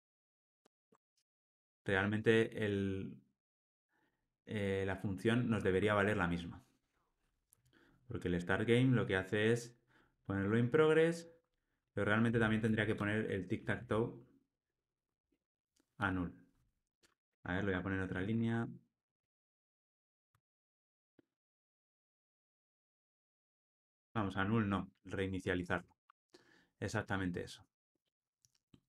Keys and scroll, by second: 0.7 alt+super+l, 7.9 super+b, 20.8 Escape, 23.1 Tab, 24.0 alt+super+l.